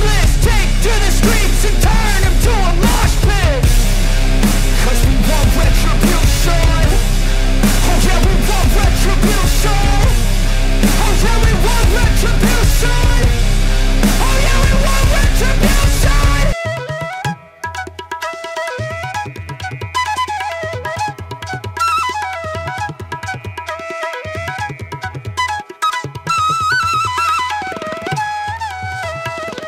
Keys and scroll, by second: 2.1 ctrl+=, 2.3 space, 2.6 ctrl+=, 2.8 ], 4.1 ctrl+-, 4.6 space, 5.0 ctrl+-, 7.4 ], 8.3 ctrl+alt+z, 9.7 ], 15.2 space, 16.0 space, 20.9 space, 29.3 ctrl+=.